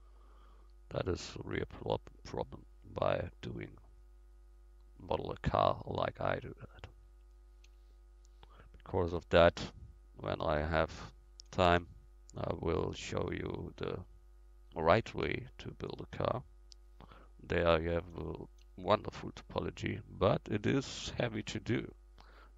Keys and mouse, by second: 1.7 f, 2.1 middle click, 2.7 middle click, 3.9-6.1 middle drag, 7.7 f, 11.8 f, 15.3 f, 18.7 f, 19.3-22.5 middle drag, 22.3 f.